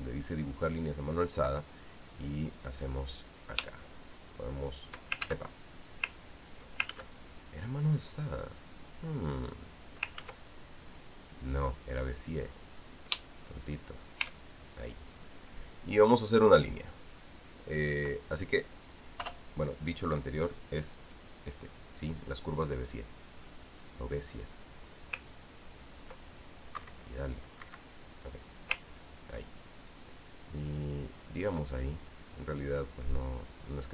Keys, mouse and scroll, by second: 3.7-5.9 drag, 6.0 ctrl+shift+z, 6.5 ctrl+shift+click, 7.7 ctrl+z, 8.9-10.7 drag, 11.0 ctrl+z, 12.2 click, 13.7-18.9 drag, 20.1 shift+Return, 25.7-26.2 drag, 27.5 Escape, 28.2 click, 28.4 Escape, 29.3-32.0 ctrl+drag.